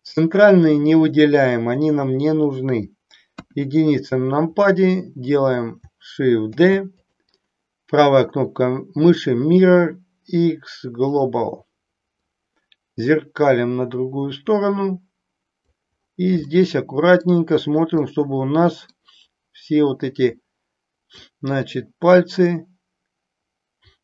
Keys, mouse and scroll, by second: 3.3 KP_1, 6.5 shift+d, 7.4-11.4 right drag, 12.2-15.5 drag, 16.5 middle click, 18.0-19.0 middle drag, 21.0-24.0 drag.